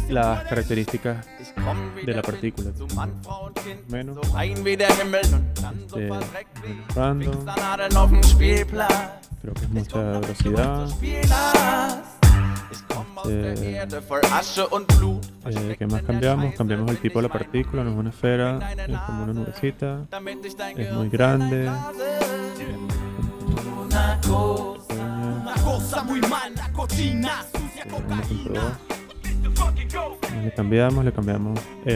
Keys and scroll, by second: 3.3 Return, 6.9 5, 7.2 Return, 9.0-9.9 typing, 10.5 Return, 22.6 ,, 23.1 9, 23.4 Return, 26.5 ,, 27.5-28.6 typing.